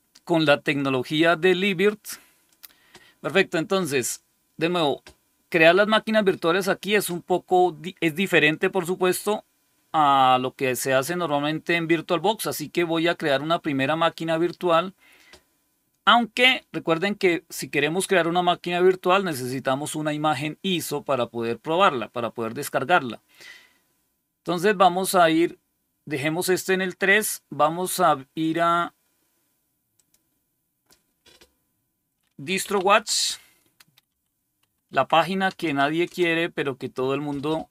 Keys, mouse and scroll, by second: 2.4 click, 26.3 click, 28.3 click, 29.8 click, 32.2-36.0 typing.